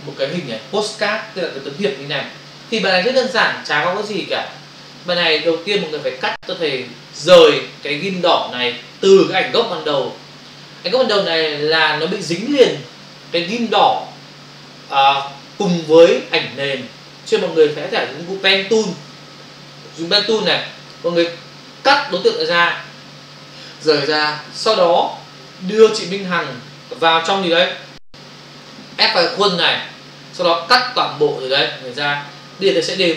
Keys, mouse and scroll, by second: 6.2 scroll up 1, 9.5 Left, 19.7 scroll up 1, 20.7 click, 27.9 Right, 32.9 Escape.